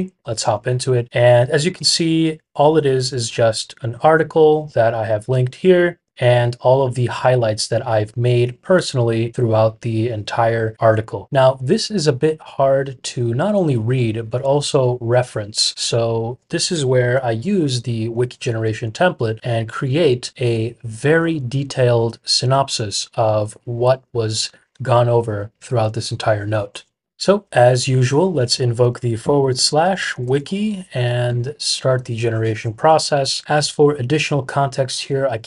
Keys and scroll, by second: 28.0-31.7 typing, 33.1-33.8 typing.